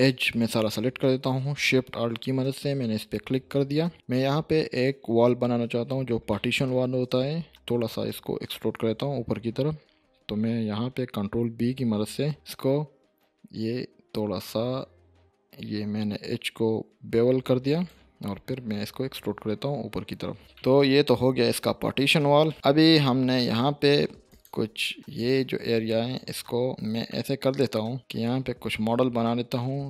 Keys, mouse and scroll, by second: 3.7-4.7 scroll up 2, 6.3-6.9 shift+middle click, 7.0 scroll down 2, 9.1-10.1 scroll up 2, 11.3 ctrl+b, 17.7 click, 19.1 e, 20.5-21.5 middle drag, 22.0-22.4 shift+scroll up 1, 22.5 shift+middle click, 22.9 scroll up 1, 23.4-24.0 middle click, 24.3 click, 24.6 Tab, 25.1 click, 25.7 Tab, 26.1 click, 26.7-27.1 scroll down 1, 27.1-28.0 middle drag.